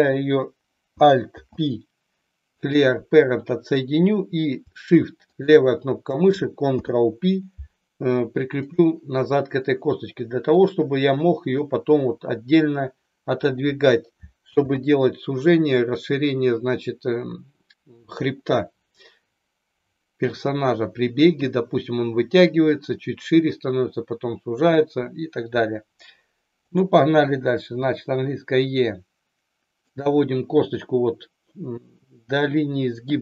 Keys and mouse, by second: 1.2 alt+p, 5.2 shift+click, 6.7 ctrl+p, 10.5 click, 11.6-13.4 drag, 14.5 ctrl+z, 27.8 e, 29.7 click.